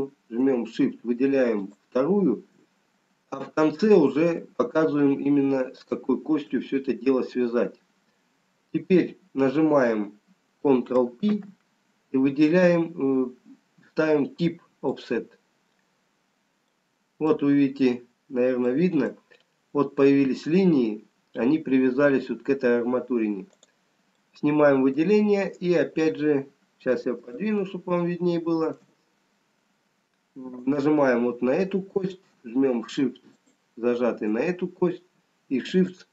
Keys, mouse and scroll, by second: 2.5 shift+click, 6.5 shift+click, 12.0 ctrl+p, 16.9 middle click, 18.2 scroll up 2, 19.7 middle click, 22.8-23.9 scroll down 3, 24.1 click, 24.1 middle click, 27.5 shift+middle click, 27.5 scroll up 4, 30.7 click, 30.7 scroll up 1, 33.4 shift+click.